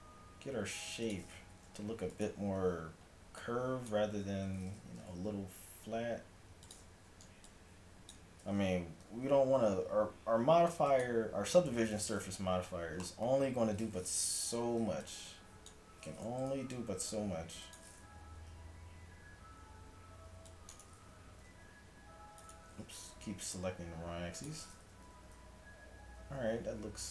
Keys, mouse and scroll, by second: 1.5 s, 2.4 a, 3.0-4.7 middle drag, 4.9 g, 6.9 a, 7.5-10.2 drag, 9.0 g, 11.7-13.2 middle drag, 14.4 a, 15.1-16.4 drag, 16.4 g, 18.2 a, 20.3 c, 21.4 g, 22.8 g, 24.7 click, 24.9 a, 25.2 z.